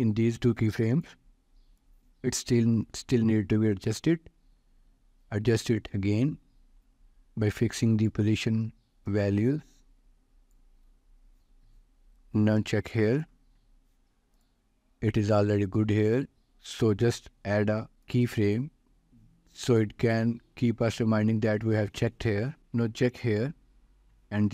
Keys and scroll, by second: 18.8 ctrl+s.